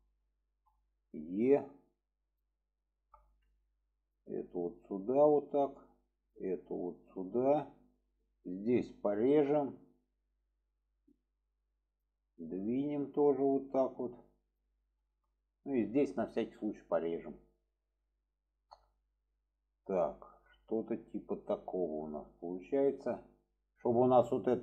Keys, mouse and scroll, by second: 0.3 shift+click, 1.3 e, 3.2 middle drag, 3.9 click, 4.6 click, 6.1 click, 6.7-7.9 drag, 9.8 click, 11.6 click, 11.9 click, 13.1 click, 14.4 click, 14.8 shift+middle click, 16.9 click, 17.9 click, 19.2 click, 20.6 shift+middle click, 22.4-22.9 middle drag, 23.4 middle click.